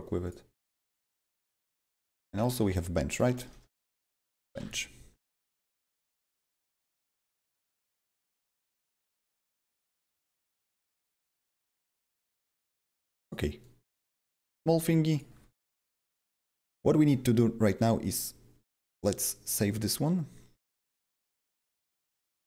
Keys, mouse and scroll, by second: 0.5-1.6 shift+drag, 1.5-6.7 typing, 5.8 right click, 6.2 right click, 7.0 click, 7.9-12.6 typing, 8.2 double click, 8.2 right click, 8.8 double click, 8.8 right click, 9.4 click, 13.6 click, 13.9 s, 17.7 click, 17.7 typing, 18.6 click, 21.0 click.